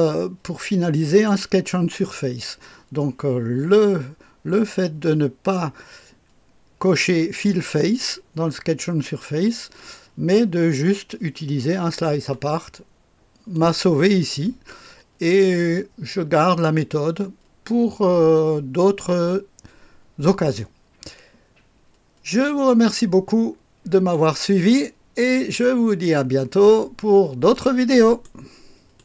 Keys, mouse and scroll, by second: 12.7-13.5 scroll down 2, 13.5-24.1 drag, 24.7 right click, 28.0 right click.